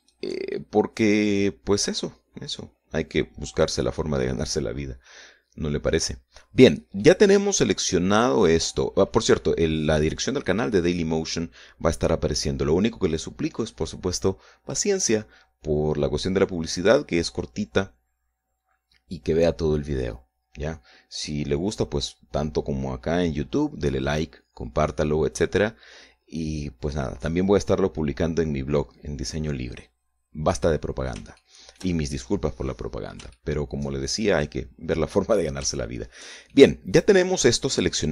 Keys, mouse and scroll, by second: 0.6 shift+right click, 1.1-3.9 shift+middle drag, 4.1-4.7 scroll up 1, 4.8-5.5 scroll down 4, 5.7-7.5 middle drag, 7.6-10.1 middle drag, 30.4 scroll up 2, 31.3 middle click, 32.0 shift+middle click, 33.3-33.7 scroll up 1, 33.9-35.1 shift+middle drag, 35.7-36.1 scroll up 1, 36.5 shift+middle click, 37.1-38.1 shift+middle drag.